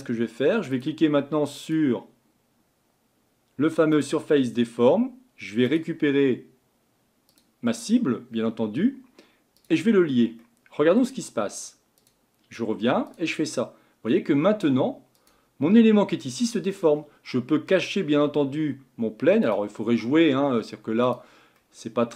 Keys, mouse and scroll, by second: 5.6-8.7 drag, 9.6 click, 10.4-12.0 middle drag, 12.0-18.1 drag, 19.4-21.6 drag, 21.6-22.1 middle drag.